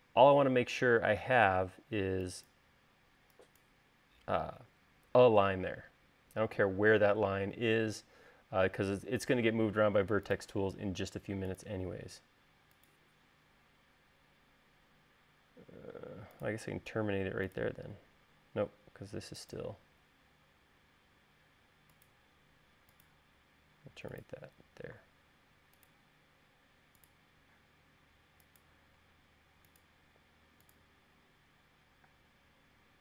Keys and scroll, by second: 2.3 e, 32.8 space.